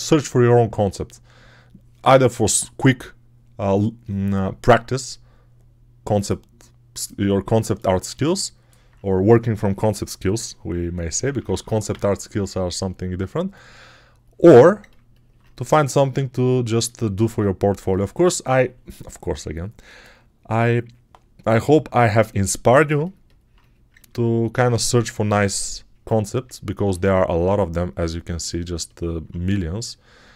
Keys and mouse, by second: 11.0-11.7 typing, 17.7 click.